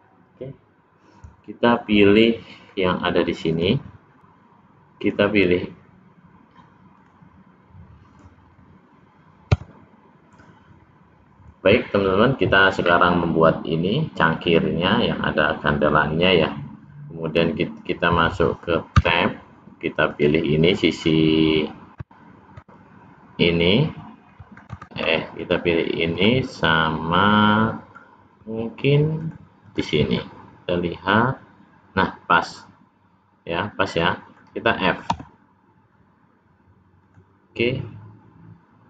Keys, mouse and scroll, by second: 1.6 middle click, 3.4 click, 5.0 click, 6.9 click, 9.5 Tab, 19.0 Tab, 20.1 click.